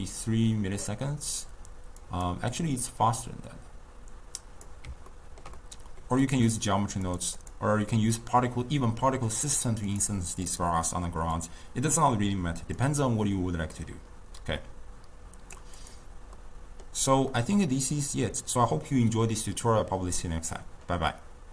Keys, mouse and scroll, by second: 2.1 click, 2.6-5.2 drag, 5.2-6.3 ctrl+middle drag, 6.3 click, 7.1 click, 7.5 click, 9.9 click, 10.5 click, 11.4 click, 12.8-16.0 drag, 16.4-20.4 middle drag.